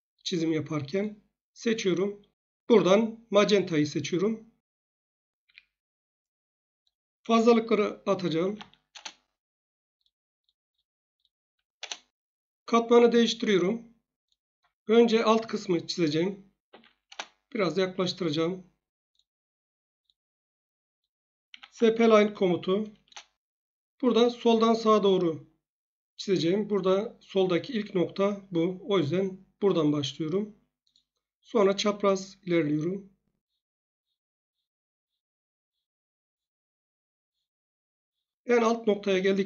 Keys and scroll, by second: 5.4 Escape, 8.1-9.0 typing, 11.7 Return, 16.6 z, 17.0 Return, 21.4-22.3 typing, 23.0 Return.